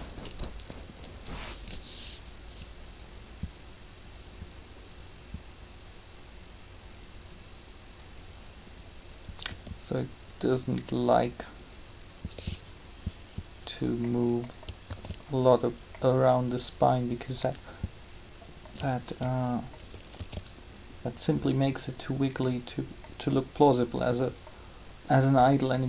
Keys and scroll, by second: 9.4 r, 14.8 alt+a, 20.0 alt+a.